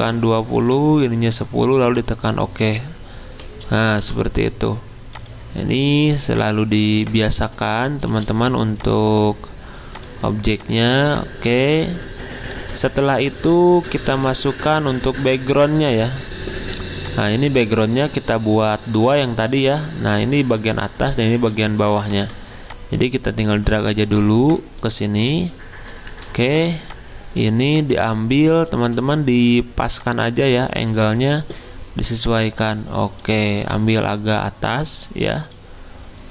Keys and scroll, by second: 0.0-1.1 typing, 4.0 v, 8.1 v, 14.0 alt+Tab, 15.1 Tab, 23.5 alt+Tab.